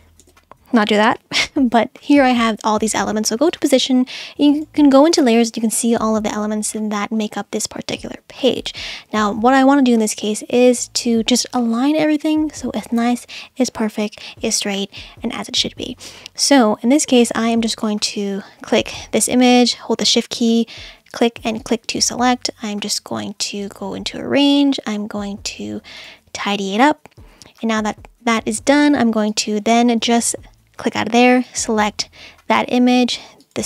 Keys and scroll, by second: 0.2 super+z.